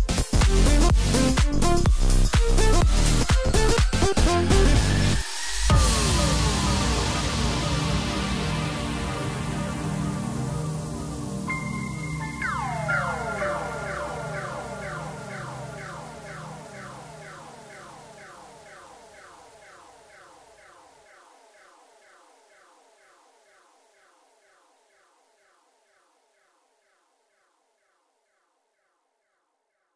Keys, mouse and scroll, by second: 1.0-1.8 scroll up 1, 1.8 KP_Divide, 2.4-3.5 scroll down 7, 3.5 s, 4.4-5.3 scroll up 10, 5.3 s, 6.7 s, 8.1 scroll up 2, 8.3 scroll down 2, 8.6-9.0 middle drag, 9.0-9.8 scroll up 1, 9.8 Tab, 10.3 click, 10.6-11.0 scroll up 2, 11.5 i, 13.5 KP_1, 14.0-15.0 scroll down 4, 15.0 e, 17.4 middle click, 18.1 scroll up 2, 18.4 middle click, 19.3 i, 21.3 KP_1, 22.1-22.8 ctrl+KP_8, 23.5-24.5 scroll down 4, 24.5 e, 26.8 scroll down 1, 29.6-29.9 ctrl+right drag.